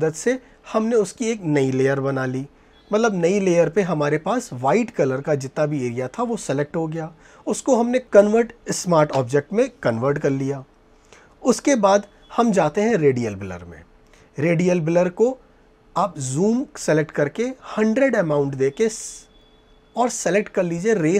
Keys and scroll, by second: 2.7 ctrl+j.